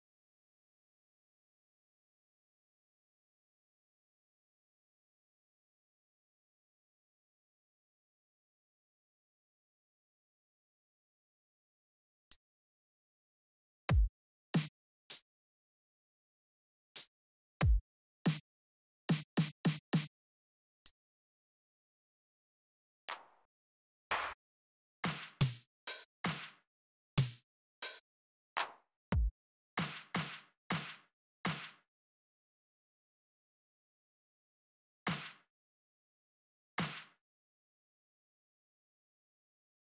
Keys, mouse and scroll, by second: 2.6 click, 3.3 click, 7.6 click, 8.8 click, 9.6 click, 10.9 click, 11.5 click, 12.0 click, 12.6 click, 13.2 click, 13.6 click, 14.2 click, 14.8 click, 15.4 click, 16.0 click, 17.3 click, 18.0 click, 18.8 click, 20.1 click, 20.6 click, 21.1 click, 21.3 click, 22.2 click, 22.8 click, 23.4 click, 23.9 click, 24.2 click, 24.7 click, 25.1 click, 25.5 click, 26.0 click, 26.9 click, 27.6 click, 28.8 click, 29.4 click, 29.9 click, 30.4 click, 31.1-33.0 drag, 34.7 click, 37.2 click.